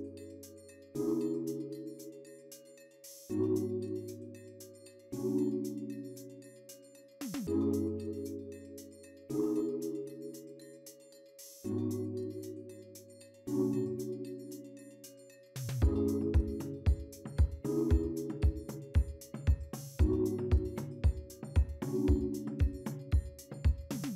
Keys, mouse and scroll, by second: 0.2 3, 0.4 Return.